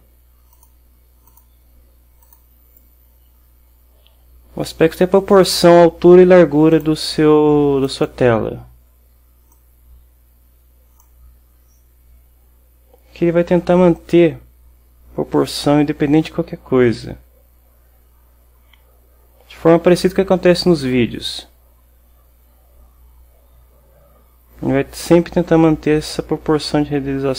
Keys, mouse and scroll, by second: 0.6 click, 1.4 click, 2.3 click, 6.8 click, 7.9 click, 9.6-11.3 drag, 14.1-27.3 drag.